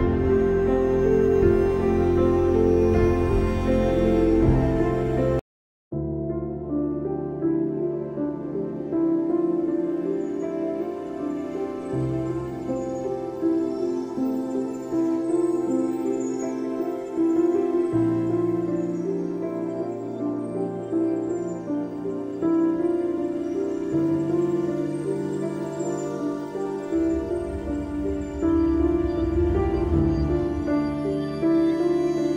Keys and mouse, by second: 0.5 shift+click, 1.2 shift+click, 1.6 shift+click, 3.5 shift+click, 4.8 shift+click, 7.4 click, 8.1 click, 8.7 space, 8.9 click, 9.1 space, 10.6 click, 11.7 click, 12.6 click, 15.1 click, 16.3 click, 16.8 space, 17.0 click, 17.1 space, 18.3 click, 19.3 space, 19.5 click, 19.8 space, 21.6 ctrl+g, 24.0 ctrl+shift+[, 25.6-27.4 drag, 27.4 space, 27.6 click, 27.9 space, 28.8-31.8 drag, 32.2 click.